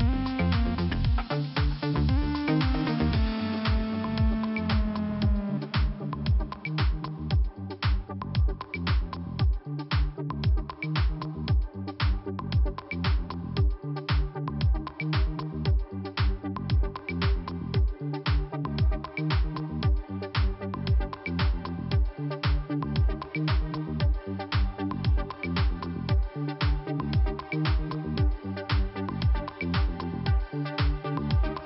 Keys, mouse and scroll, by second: 3.8 click, 4.5 click, 5.7 click, 7.8 click, 7.9 click, 8.5 click, 9.7 click, 10.4 scroll up 1, 11.2 click, 12.1 click, 14.1 click, 14.6 click, 16.1 click, 16.2 click, 17.0 click, 18.9 click, 22.4 click, 23.1 click, 24.9 click, 25.9 click, 26.5 click, 26.9 click, 27.0 double click, 27.5 double click, 29.1 click, 29.1 click, 29.7 click, 30.2 click.